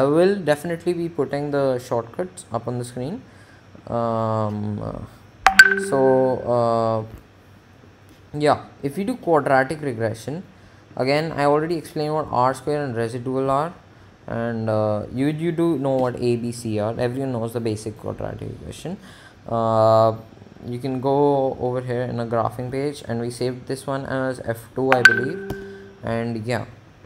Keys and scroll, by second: 14.0 Up, 19.0 Home, 24.8 Up, 25.8 Return.